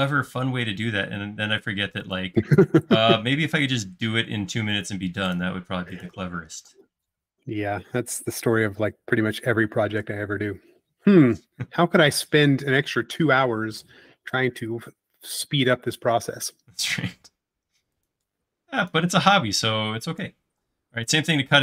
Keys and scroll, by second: 9.4 space, 12.0 l, 20.6 space.